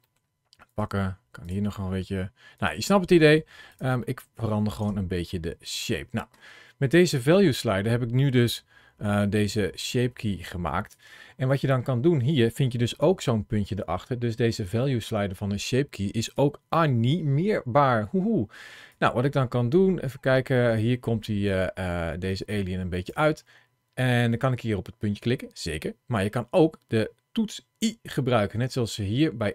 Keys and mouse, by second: 0.1 click, 0.3 ctrl+KP_Add, 0.5 ctrl+KP_Add, 0.6 middle click, 0.8 g, 0.9 click, 1.0 middle click, 1.1 middle click, 1.2 click, 1.4 click, 1.4 g, 1.5 middle click, 2.4 click, 3.5 click, 3.9 middle click, 4.6 Tab, 5.2 middle click, 7.1-10.7 drag, 12.7 ctrl+shift+a, 18.8-22.9 drag, 28.5 i.